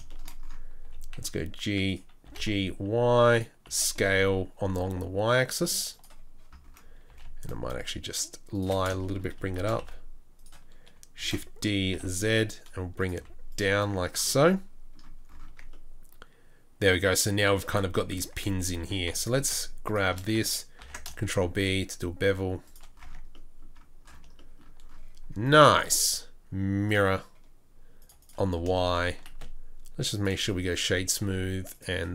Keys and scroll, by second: 0.8 g, 2.2 g, 3.6 g, 3.6 s, 7.0 g, 9.6 shift+s, 11.2 shift+d, 13.1 z, 15.5 Tab, 18.2 Tab, 18.8 2, 20.8 ctrl+b, 23.0 Tab, 29.3 space.